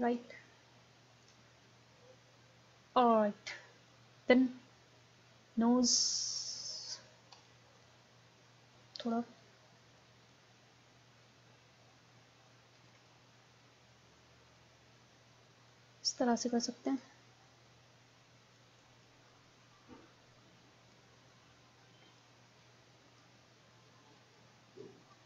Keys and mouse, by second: 2.9-4.7 drag, 5.3-7.1 middle drag, 7.7 KP_1, 7.9 middle click, 8.8-12.1 drag, 15.6 middle click, 17.7 click, 18.2 middle click, 18.6-21.2 drag, 21.2 middle click, 21.2 click, 21.3-24.4 middle drag.